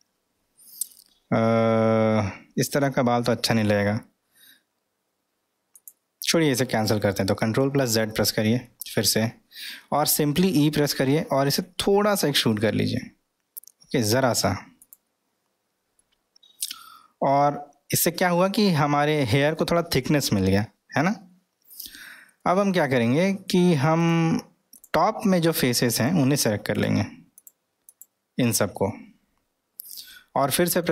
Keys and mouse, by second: 10.3 ctrl+e, 11.0 e, 16.0-18.4 middle drag, 19.8-21.7 middle drag, 22.4-23.5 middle drag, 24.0 click, 24.7 click, 26.0 click, 26.4 drag, 26.7 click, 27.9 click, 28.8-30.8 middle drag.